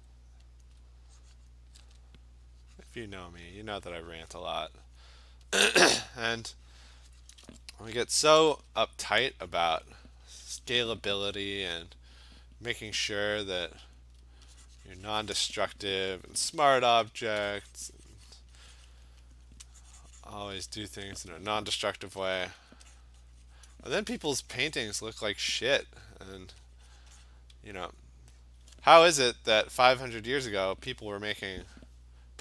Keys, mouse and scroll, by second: 0.7 alt+click, 0.8 alt+click, 1.5 click, 3.2 click, 4.5 click, 5.0 click, 5.6 alt+click, 7.3 click, 8.4 ], 8.6 ], 8.8 ], 10.7 click, 14.0 alt+click, 15.6 click, 16.4-17.8 typing, 17.1 click, 17.8 click, 18.4 click, 19.0 click, 19.0 alt+click, 19.4 alt+click, 19.6 alt+click, 20.3 click, 20.9 alt+click, 21.2 alt+click, 22.1 ], 22.3 ], 22.4 ], 22.6 ], 22.7 click, 23.1 click, 23.6 click, 24.1 click, 24.3 click, 24.4 alt+click, 24.6 click, 24.8 click, 25.1 click, 25.3 click, 26.2 alt+click, 26.8 click, 27.1 click, 27.3 click, 27.4 click, 27.9 alt+click, 28.4 alt+click, 30.5 click.